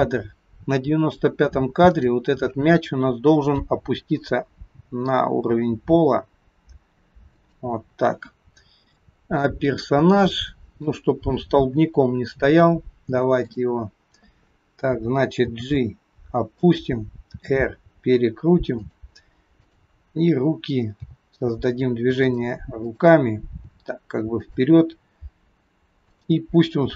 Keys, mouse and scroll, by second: 2.0 click, 3.6 g, 9.0 shift+middle click, 9.7-10.3 scroll up 4, 10.4 shift+middle click, 11.9-12.8 scroll up 2, 13.5 click, 15.5 g, 17.3 r, 19.8 click, 21.1 g, 22.9 click, 23.5 g, 26.1 click.